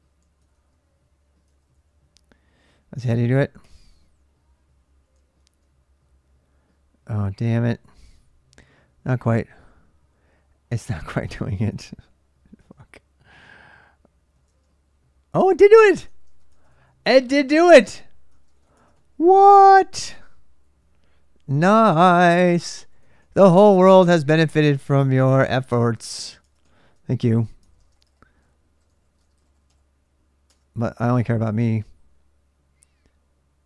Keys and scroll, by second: 0.0-0.3 typing, 1.3 ctrl+[, 1.3 ctrl+j, 1.4 k, 3.4 typing, 5.1 typing, 7.8 ctrl+[, 7.9 j, 11.2-14.3 typing, 15.8-24.8 typing, 21.5 ctrl+[, 21.9 Return, 23.3 ctrl+[, 25.8 ctrl+[, 26.0-26.4 typing, 27.4 ctrl+[, 27.6-29.7 typing, 27.8 Return, 30.2 Return.